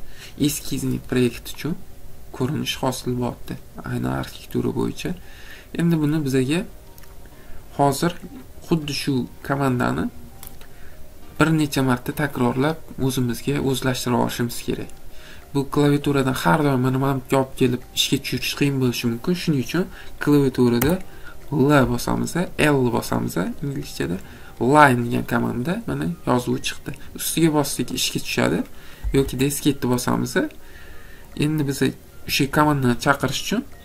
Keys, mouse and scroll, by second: 1.6 middle click, 1.7 middle click, 2.1 middle click, 8.3 middle click, 8.4 middle click, 8.8 middle click, 28.0 click, 29.3 Escape.